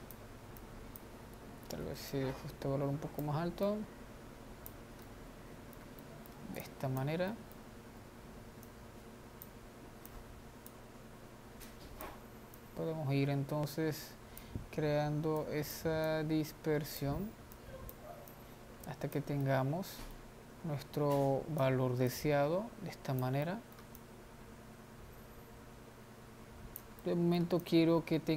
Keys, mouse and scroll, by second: 2.1 ctrl+z, 2.4-5.2 drag, 5.2-7.0 middle drag, 7.0 click, 7.5-8.9 middle drag, 8.9-19.6 drag, 19.6-21.4 middle drag, 21.4-23.6 drag, 23.6 middle click, 24.2-27.8 drag, 27.8 middle click, 28.0-28.3 drag.